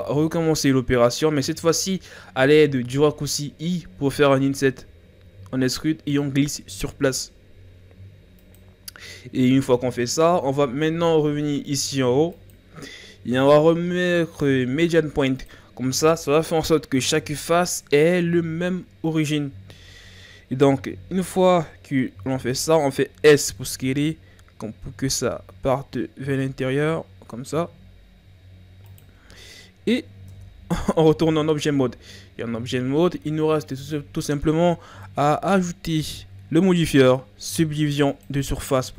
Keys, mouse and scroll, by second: 4.9 i, 12.3-15.4 drag, 19.9-20.8 scroll down 2, 20.8-21.4 scroll up 1, 21.4-23.2 ctrl+scroll down 1, 23.2 s, 29.7-30.3 scroll down 2, 30.3 Tab, 31.2-34.0 ctrl+scroll up 2.